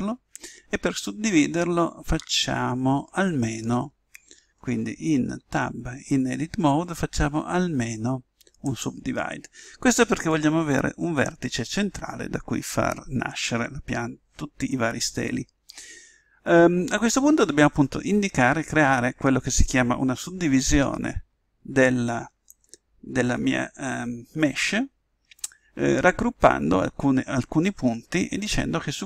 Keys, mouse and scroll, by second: 5.3 Tab, 8.6 click.